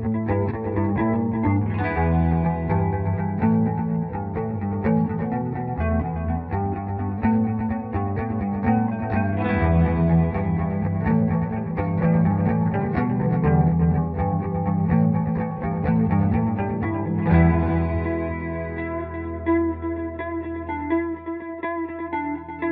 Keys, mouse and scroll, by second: 1.0-2.2 ctrl+right drag, 2.2 ctrl+r, 2.5 F3, 5.2 ctrl+r, 6.2 typing, 6.5-9.9 drag, 9.9 ctrl+g, 12.8 click, 13.4-15.3 typing, 15.5 click, 17.8-20.0 shift+drag, 20.0 F4, 20.7 shift+Page_Down.